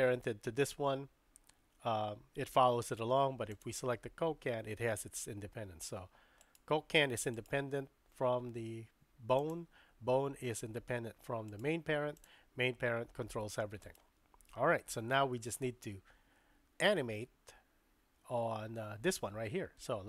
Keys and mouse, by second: 3.5 click, 4.4 g, 7.0 g, 9.4 click, 10.8 g, 12.7 g.